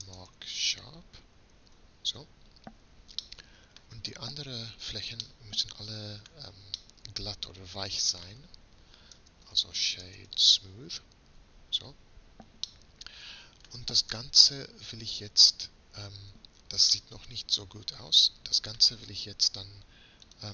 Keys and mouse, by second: 4.2 a, 4.5 a, 9.2 space, 16.3 Tab, 20.3-20.5 drag.